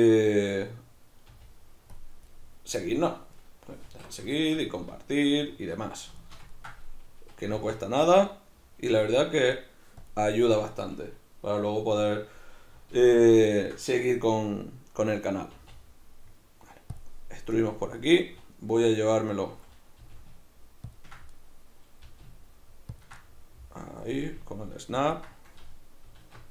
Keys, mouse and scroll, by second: 1.3 g, 2.0 click, 2.3-3.3 middle drag, 3.3 right click, 3.9 alt+q, 4.4-7.5 shift+middle drag, 4.9 alt+q, 7.5 g, 10.1 click, 13.0 alt+q, 13.4-15.6 shift+middle drag, 15.6 e, 17.0 click, 17.6-20.0 middle drag, 20.0 g, 21.0 ctrl+click, 21.4-23.0 middle drag, 22.1 g, 23.0 ctrl+click, 23.2-25.2 middle drag, 24.2 g, 25.2 ctrl+click, 26.2 alt+q.